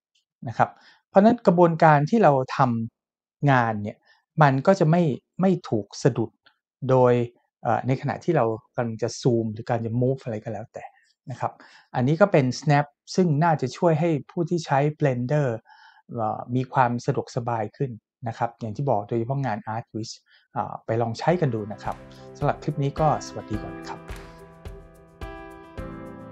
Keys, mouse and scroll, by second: 5.1-5.7 middle drag, 6.0 shift+middle drag.